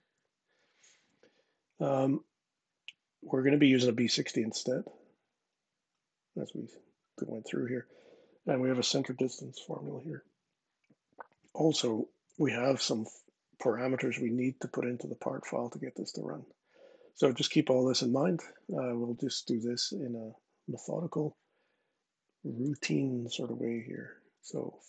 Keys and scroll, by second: 23.6 super+Tab.